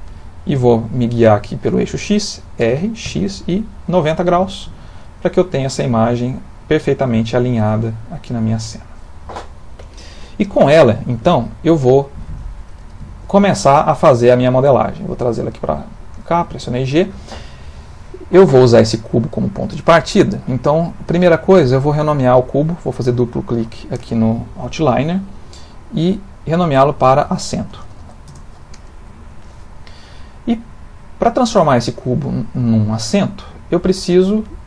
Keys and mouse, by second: 2.6 r, 4.9 middle click, 5.2 middle click, 5.5 middle click, 5.9 middle click, 6.1 middle click, 6.1 middle click, 6.7 middle click, 6.8 middle click, 10.6 ctrl+middle click, 11.4 shift+middle click, 11.9 ctrl+middle click, 14.1 g, 16.3 g, 18.9 click, 22.0 click, 22.1 click, 22.9 click, 23.1 click, 27.6 s, 30.3 middle click.